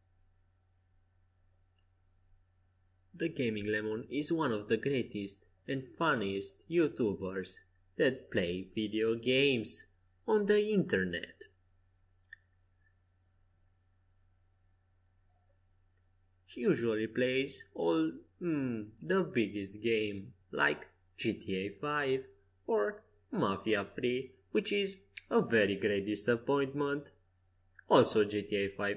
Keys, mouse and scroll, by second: 3.9 a, 8.4 c, 9.6-11.7 drag, 11.2 c, 13.0 a, 13.8 c, 15.3-17.0 drag, 17.1 c, 17.3 r, 20.0 Escape, 23.0 r, 24.8-27.1 drag, 26.4 g, 27.8 a, 28.5 c.